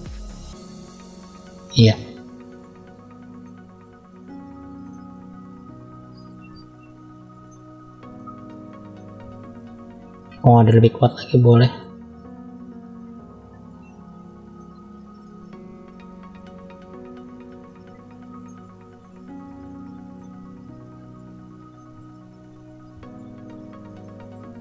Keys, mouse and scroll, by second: 0.5 click, 1.8-2.4 scroll down 2, 2.4 middle click, 4.7 middle click, 5.6 shift+middle click, 6.4-7.3 scroll up 1, 7.3 middle click, 8.6 click, 10.7-11.7 drag, 12.4 click, 14.4 middle click, 15.7 click, 16.8 click, 17.2 click, 18.3 middle click, 19.3 click, 21.0 click, 21.6 middle click, 22.7 click.